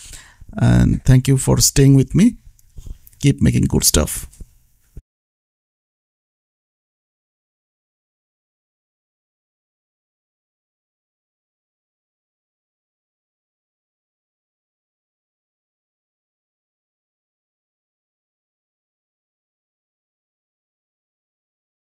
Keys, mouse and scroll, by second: 0.5 shift+Left, 1.6 KP_4, 1.8 ctrl+s, 2.6 shift+s, 3.0 shift+Left, 6.2 click, 7.2 shift+Left, 7.8 KP_5, 8.1 ctrl+s, 9.2 click, 12.6 click, 15.3 KP_1, 15.6 ctrl+s, 18.4 shift+Left, 19.5 Left, 19.8 ctrl+s, 20.5 shift+s, 20.6 shift+Left, 21.2 Left, 21.6 ctrl+s.